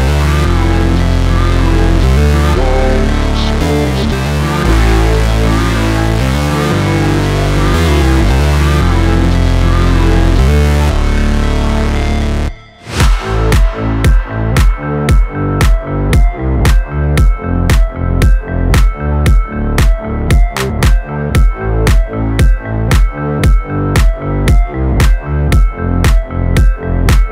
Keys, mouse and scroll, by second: 1.8 alt+click, 2.4-6.8 typing, 7.0 click, 7.4 ctrl+d, 7.9 scroll down 1, 8.7-10.4 drag, 10.4 shift+x, 10.6 f, 12.5 click, 13.3 scroll down 1, 13.9-14.5 scroll down 2, 15.1 scroll down 1, 15.6 scroll down 1, 16.0 click, 17.4 ctrl+c, 18.0 click, 18.3 scroll down 1, 19.3 click, 19.8 scroll down 1, 20.1 ctrl+v, 20.6 scroll down 1, 21.5 click, 22.7 ctrl+d, 27.0-27.3 drag.